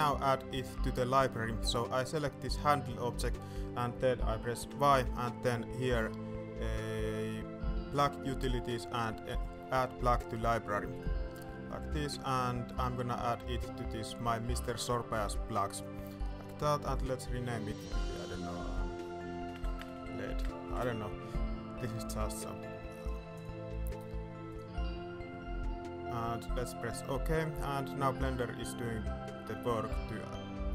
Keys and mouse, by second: 0.4 shift+middle drag, 1.6 click, 4.6 y, 19.2 BackSpace.